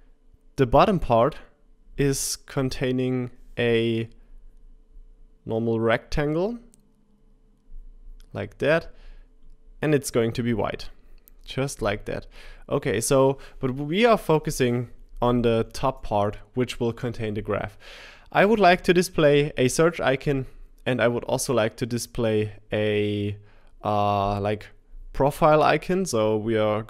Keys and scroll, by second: 15.8 typing.